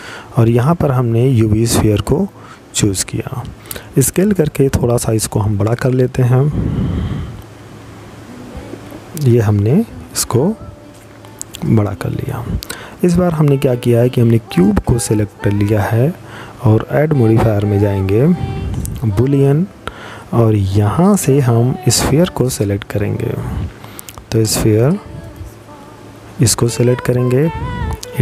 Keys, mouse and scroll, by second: 3.0 s, 12.3 right click, 14.5 click, 18.8 click, 25.7 click.